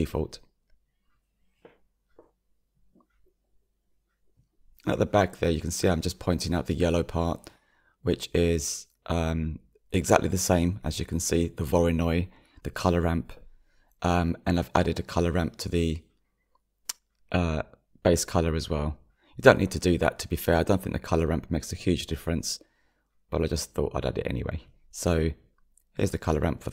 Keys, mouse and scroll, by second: 1.3 scroll down 2, 1.6-3.2 middle drag, 3.2 click, 6.8-18.6 drag, 18.6-19.7 middle drag, 19.7-26.7 drag.